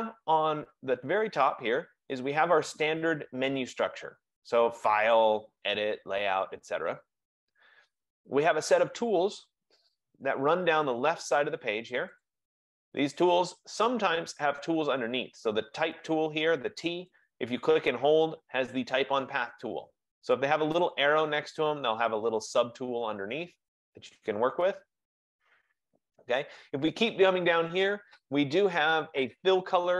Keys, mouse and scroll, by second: 5.3-12.3 drag, 20.4 click, 21.1 click.